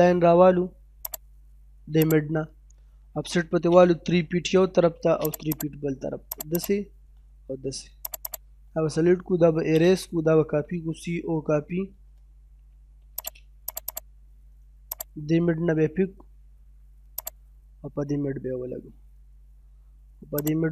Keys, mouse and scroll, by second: 1.1 click, 3.0 o, 3.1 space, 3.9 3, 4.6 space, 4.9 scroll up 1, 5.3 click, 6.9-7.4 scroll down 1, 8.1 click, 9.0-10.5 typing, 12.0-12.7 typing, 13.2 click, 13.9 right click, 15.0 click, 15.2 scroll down 1, 15.8 middle click, 17.2 click, 17.9 scroll down 1, 18.2 middle click, 18.7-19.8 scroll up 1, 20.4 click.